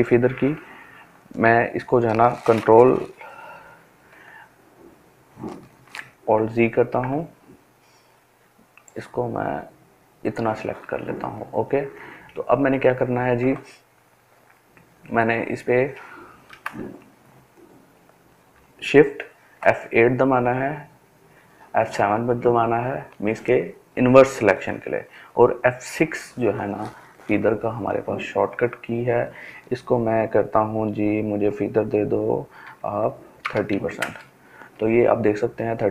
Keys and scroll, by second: 5.0 ctrl+alt+z, 18.2 shift+F8, 20.4 shift+F7, 24.3 shift+F6, 31.4-32.0 typing, 32.6 Return, 33.8-35.3 typing.